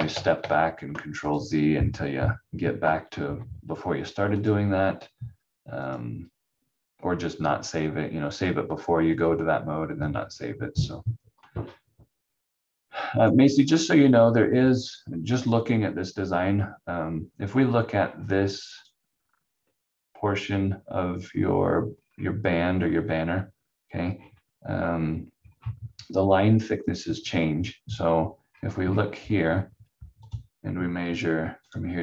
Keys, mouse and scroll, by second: 0.0 ctrl+z, 0.0 ctrl+z, 0.3 ctrl+z, 1.2 click, 4.3 click, 8.8 scroll up 1, 10.1 scroll down 1, 12.2 scroll up 1, 13.2 click, 14.6-15.6 scroll down 1, 18.0 scroll up 1, 18.8 click, 21.9-22.2 scroll down 1, 24.1-25.3 scroll up 1, 25.3-26.2 scroll down 1, 26.8 click, 28.4 scroll up 1, 30.2 click.